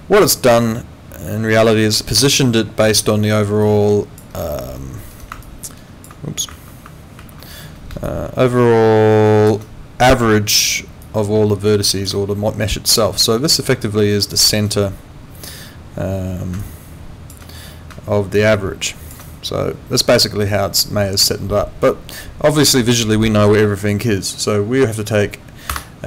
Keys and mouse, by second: 25.7 Escape.